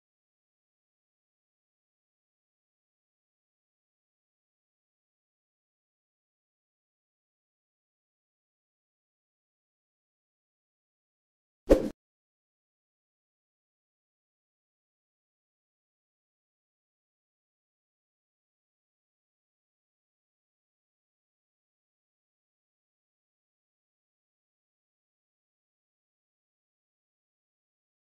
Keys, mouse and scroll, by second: 0.8-6.6 alt+shift+drag, 6.6-10.8 alt+shift+drag, 10.8 scroll up 1, 17.1 click, 20.1-24.8 drag.